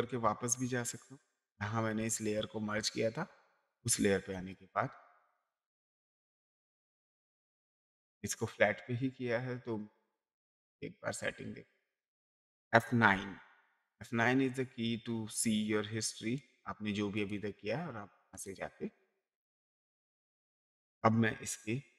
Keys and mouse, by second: 8.4 click, 13.1 F9, 16.4 click, 18.3 click, 19.8 click.